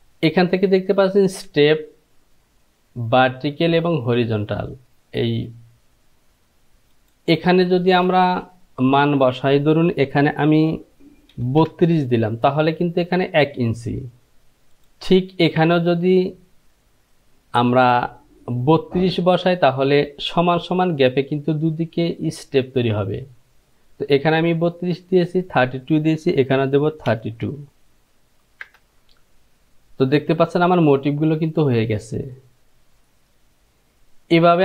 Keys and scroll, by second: 10.9 BackSpace, 11.6 Page_Down, 11.9 Down, 27.5 Page_Down, 27.7 Down, 28.9 Return.